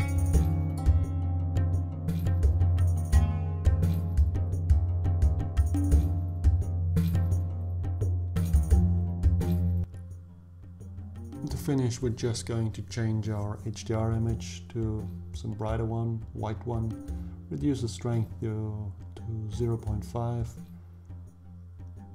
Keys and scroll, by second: 16.9 5, 17.2 Return.